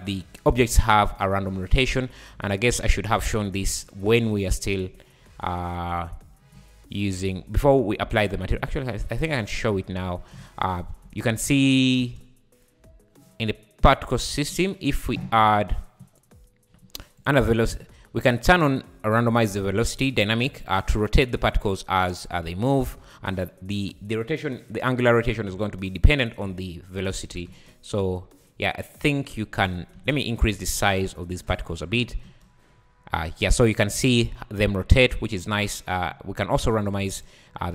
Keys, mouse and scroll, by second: 0.9 scroll down 3, 1.4 `, 2.6 `, 3.2 `, 3.8 click, 8.1 `, 8.5 z, 8.7 z, 8.9 `, 9.7-10.0 scroll up 5, 10.0 `, 10.9 scroll down 1, 11.0 space, 12.0 space, 14.1 click, 15.3-15.8 scroll down 6, 17.2 click, 18.7-20.1 drag, 20.7-24.6 drag, 24.8-26.9 scroll down 1, 27.2 `, 27.4 click, 27.5 space, 28.1 scroll down 3, 28.4 `, 29.0 scroll down 3, 29.4-30.0 scroll up 6, 30.0 space, 30.5-31.4 scroll down 3, 31.4 click, 32.1 scroll down 3, 32.2 space, 32.7 scroll up 3, 35.1 space, 35.9-36.4 scroll down 6, 36.8 click.